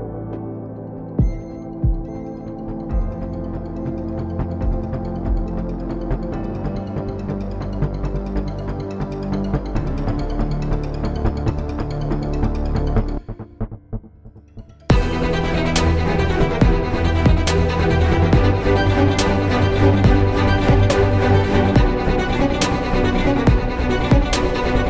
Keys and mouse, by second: 10.1 right click, 13.4 drag, 13.5-15.6 drag, 15.6 s, 16.4 s, 17.8 s, 21.5 Tab.